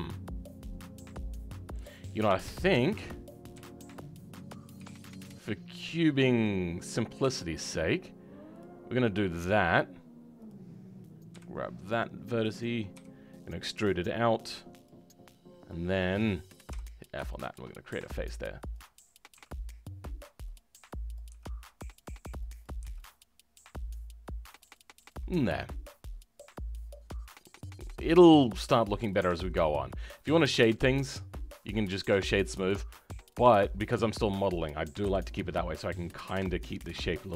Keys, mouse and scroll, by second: 2.7 click, 8.9-10.4 middle drag, 10.4 click.